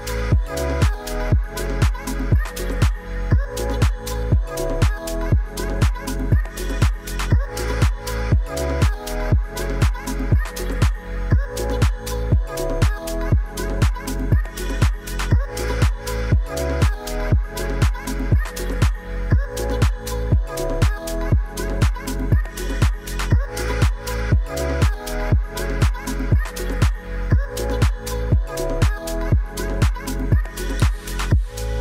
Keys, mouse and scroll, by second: 1.5 click, 2.7 r, 3.2 click, 3.8 s, 4.1 click, 4.6 g, 5.0 click, 6.1 r, 10.4 r, 12.1 g, 12.9 click, 13.8 s, 14.0 click, 16.0 click, 16.8 click, 17.8 Tab, 18.4 ctrl+s, 19.3 click, 19.5 shift+middle click, 20.6 Tab, 21.5 shift+click, 22.6 click, 23.5 shift+z, 23.9 click, 25.0 3, 25.6 shift+click, 25.8 middle click, 26.4 shift+click, 27.0 shift+click, 27.3 middle click, 28.2-29.1 middle drag, 29.1 click, 30.0 click.